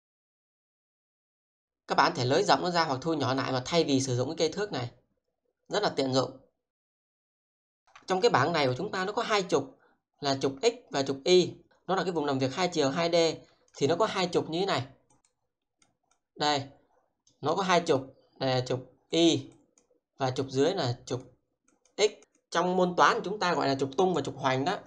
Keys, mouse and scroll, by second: 7.4 shift+middle click, 8.2 alt+middle click, 11.8 alt+middle click, 13.7 click, 16.2 double click, 17.4 click, 19.5 double click, 20.8 click, 22.1 double click, 22.4 click.